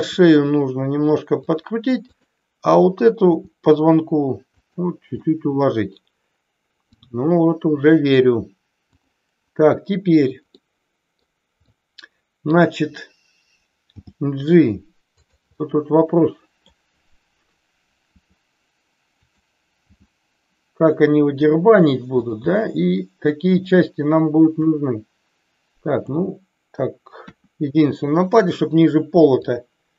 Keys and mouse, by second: 1.4 click, 2.0 click, 3.3 r, 4.5 click, 5.3-8.0 middle drag, 10.5 middle click, 11.6-12.5 middle drag, 13.9 g, 15.6-16.8 middle drag, 18.1 r, 19.1 click, 19.8 g, 22.5-23.6 middle drag, 24.6-26.0 drag, 27.1 KP_1, 29.5-29.9 drag.